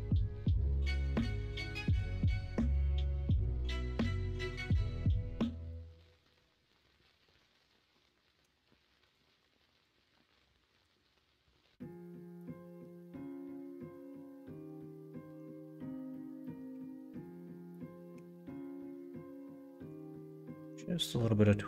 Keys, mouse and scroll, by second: 1.9 ctrl+r, 3.6 ctrl+b, 11.4 r, 14.1 ctrl+z, 16.7 1, 18.1 g.